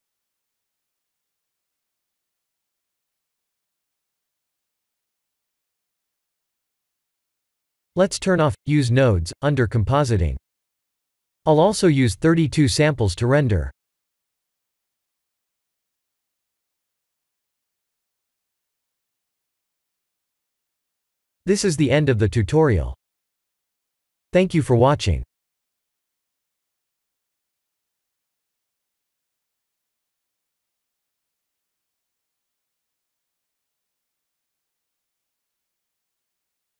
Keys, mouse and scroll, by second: 2.4 click, 10.9 click, 11.4 click, 11.9 click, 15.4 click, 15.5 click, 16.5 click, 19.0 click, 19.4 click, 19.8 ctrl+s.